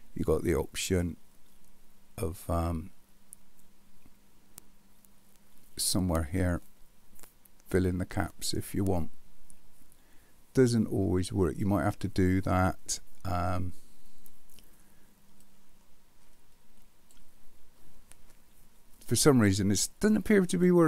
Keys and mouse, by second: 7.7 click, 10.6-11.6 middle drag, 15.5-17.1 drag, 19.8-20.6 middle drag.